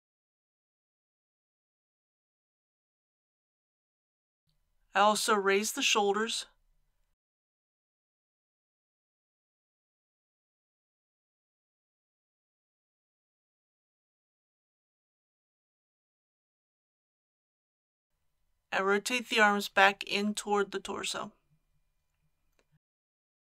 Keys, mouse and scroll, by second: 1.3 click, 3.8 KP_1, 5.5 click, 7.2 r, 7.5 y, 9.6 click, 11.1 r, 11.4 y, 13.8 click, 19.7 r, 20.4 y.